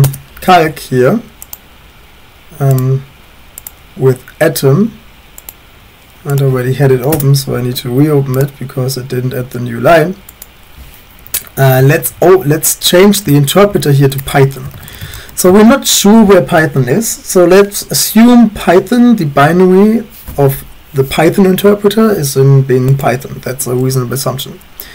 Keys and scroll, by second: 0.0-0.3 typing, 7.0 Up, 7.1 Return, 11.2 Up, 11.3 Up, 11.8 Right, 13.6 ctrl+Right, 14.4-16.1 typing.